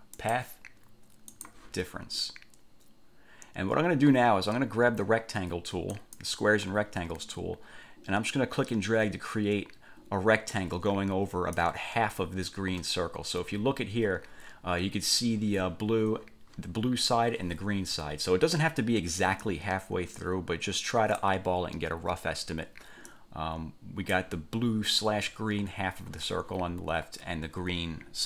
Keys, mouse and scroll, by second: 0.3 click, 1.5 click, 6.1 click, 8.5-11.9 drag, 13.1-13.5 ctrl+scroll up 2, 18.0 F1, 19.7 click, 23.3 click.